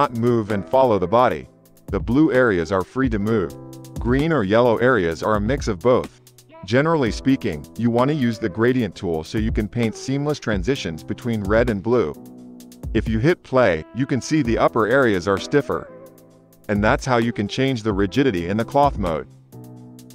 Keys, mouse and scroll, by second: 6.6-12.4 drag, 10.0 space, 10.6 space, 12.1 shift+Left, 12.4 space, 13.1 space, 13.5 shift+Left, 13.7 space, 14.0 space, 16.2 space, 17.1 space, 17.5 space.